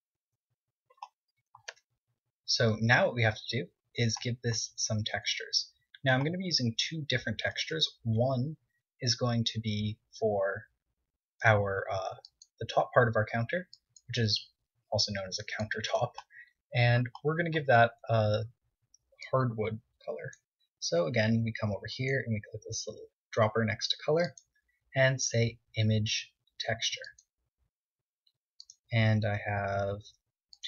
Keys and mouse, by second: 1.8 Tab, 2.6 z, 3.3 KP_1, 3.9 z, 5.2 c, 8.9 KP_1, 10.1 v, 11.6 c, 15.9 right click, 16.2-17.8 middle drag, 18.0 KP_1, 20.8 click, 21.9-23.6 drag, 24.2-26.1 drag, 28.5-30.4 drag.